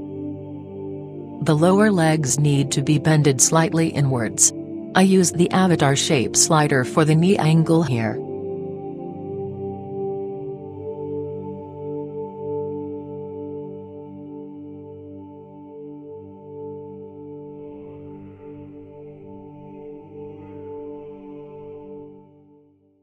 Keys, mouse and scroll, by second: 0.4 click, 0.8-2.1 middle drag, 2.1-3.1 right drag, 2.8 KP_1, 3.3 right click, 5.5 click, 9.8-11.9 drag, 16.6-18.2 right drag, 17.7 r, 21.2-23.0 drag.